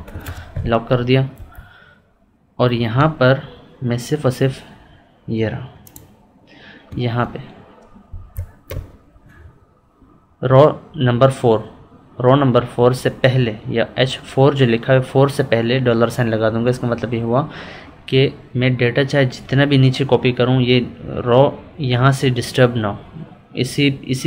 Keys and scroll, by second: 1.3 Up.